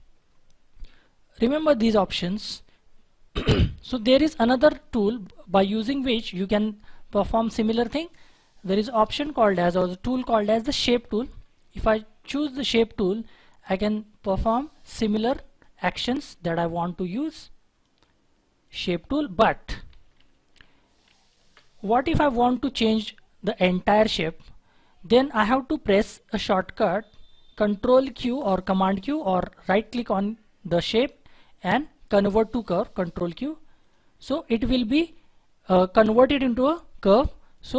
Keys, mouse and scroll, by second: 20.1 ctrl+z, 20.5 ctrl+z, 21.0 ctrl+z, 29.6 right click.